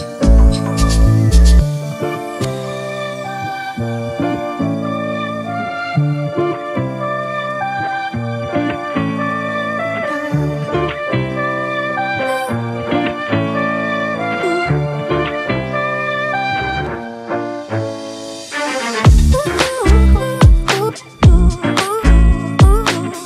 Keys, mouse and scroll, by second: 1.4 e.